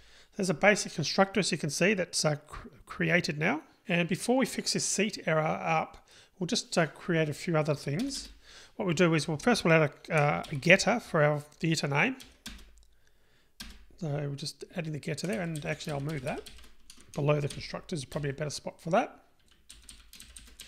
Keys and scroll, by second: 10.6 super+n, 13.9 super+n, 17.8 super+x.